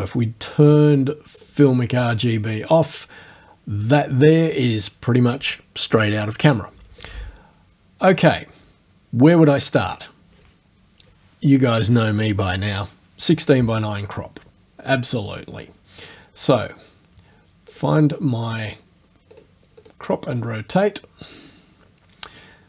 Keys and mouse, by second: 1.4 click, 2.9 click, 8.2 click, 17.8 click, 19.4 click, 19.9 click.